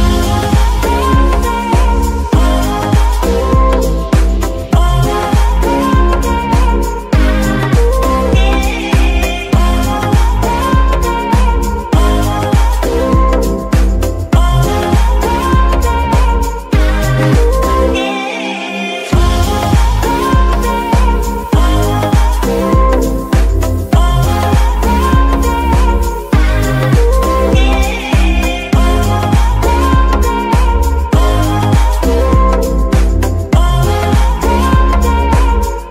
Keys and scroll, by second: 0.6 Escape, 1.0 s, 2.3 Tab, 2.8 shift+s, 5.4 g, 9.4 z, 13.3 KP_Divide, 16.6 [, 25.0 KP_Divide, 26.8 g, 27.2 Escape, 31.8-32.9 typing, 34.2 r, 35.5 t.